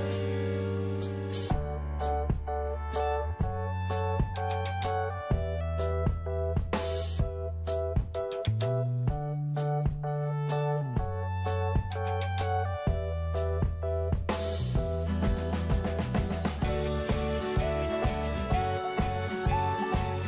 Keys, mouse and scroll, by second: 0.6 scroll down 1, 2.3 click, 7.1-8.4 middle drag, 8.5 click, 10.4 right click, 11.3-20.2 drag.